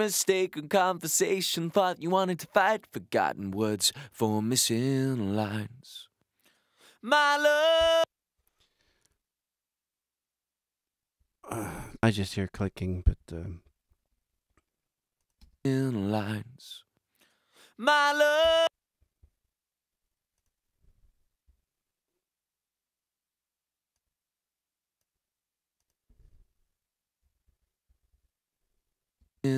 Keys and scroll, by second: 7.8 space, 15.4 space, 18.4 space, 21.4 Delete, 27.2 t, 29.2 space.